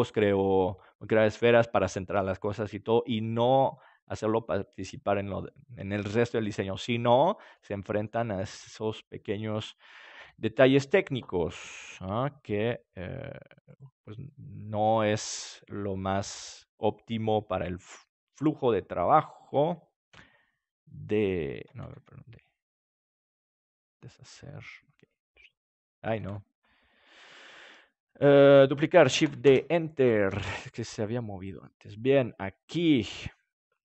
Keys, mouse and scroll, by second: 7.5-8.6 middle drag, 8.6-10.1 right drag, 10.1 KP_3, 11.8 g, 13.8-15.5 drag, 14.2 middle click, 15.5 middle click, 16.0-18.4 drag, 18.4-19.5 right drag, 20.1 shift+d, 21.6-24.1 drag, 24.1 ctrl+z, 24.9-28.4 drag, 28.4 ctrl+z, 29.1 shift+d, 31.0-33.6 drag.